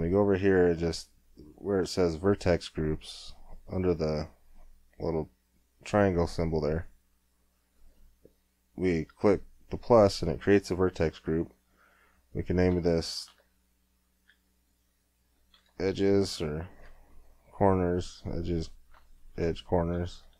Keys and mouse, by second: 6.7-13.4 drag, 19.1 BackSpace, 19.3 BackSpace.